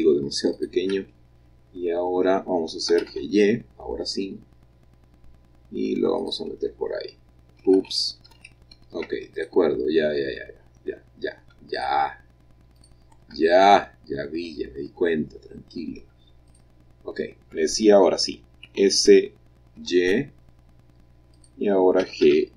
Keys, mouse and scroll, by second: 0.4 shift+click, 1.3-2.8 shift+middle drag, 2.8 g, 3.0 y, 6.1 click, 7.7 ctrl+z, 8.2 ctrl+z, 9.3 ctrl+click, 11.4 shift+middle click, 11.7 shift+click, 12.7 shift+click, 13.3-14.3 shift+middle drag, 14.4 middle click, 16.0 shift+middle click, 16.4 shift+click, 18.6 s, 19.7 y, 21.2 click, 21.9 g, 22.1 y.